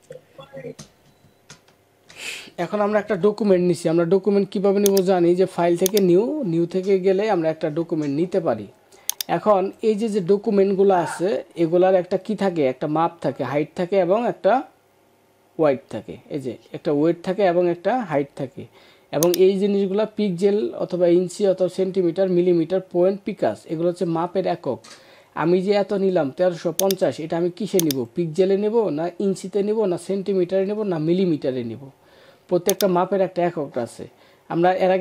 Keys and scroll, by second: 1.4 ctrl+-.